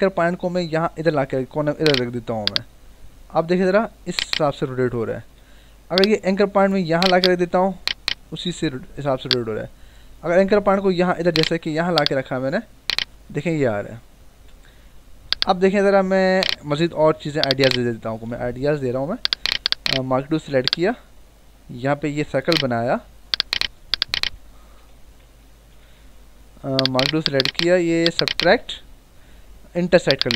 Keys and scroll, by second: 5.3 ctrl+z, 8.3 ctrl+z, 14.3 Escape, 24.7 Menu, 25.1 ctrl+-, 25.8 ctrl+=.